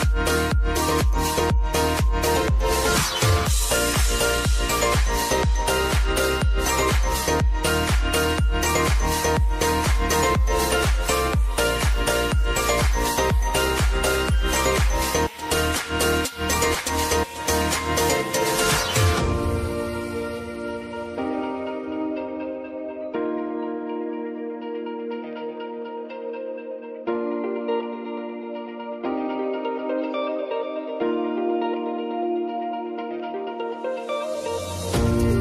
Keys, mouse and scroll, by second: 3.7 j, 4.5 click, 5.4 F9, 5.9 space, 8.1 space, 9.6 click, 13.1-14.5 drag, 15.1-15.9 typing, 17.3-25.7 drag, 25.7 Return, 26.5 space, 28.6 k, 30.1-32.1 drag, 32.1 space, 35.0 space.